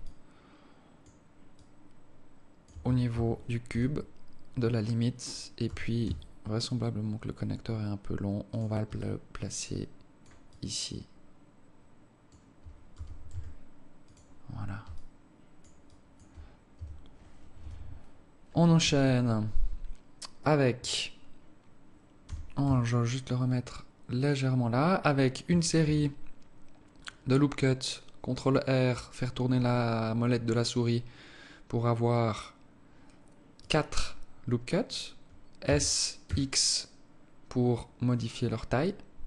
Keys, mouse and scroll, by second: 1.5 alt+click, 2.7 Tab, 3.1 Tab, 3.6 z, 5.6 g, 8.9 alt+click, 10.4 alt+click, 12.9 g, 14.8 alt+click, 15.8 alt+click, 16.7 Tab, 17.5 KP_7, 18.7 z, 19.2 scroll up 3, 22.1 g, 25.7 ctrl+r, 35.5 s.